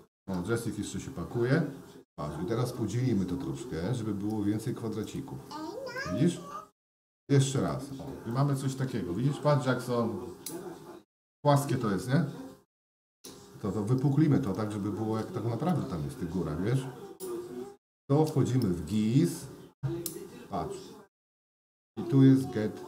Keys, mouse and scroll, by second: 0.5 ctrl+e, 6.2 ctrl+e, 8.3-9.4 middle drag, 10.4 Tab, 11.4-13.3 middle drag, 14.5-15.8 middle drag, 18.8-22.8 drag.